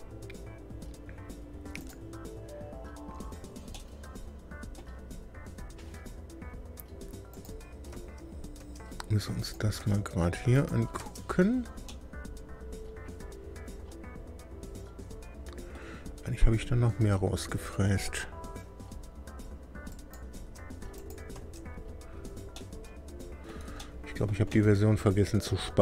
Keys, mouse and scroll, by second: 1.8 click, 3.7-4.9 middle drag, 7.3 click, 7.9 space, 8.6 space, 9.4 click, 9.8 space, 10.5 click, 11.0 space, 11.8-15.9 middle drag, 16.5-16.8 scroll down 1, 19.9 click, 20.3 space, 20.9 click, 21.3 space, 22.5-23.6 middle drag, 23.8 shift+middle click, 24.5-25.8 shift+middle drag.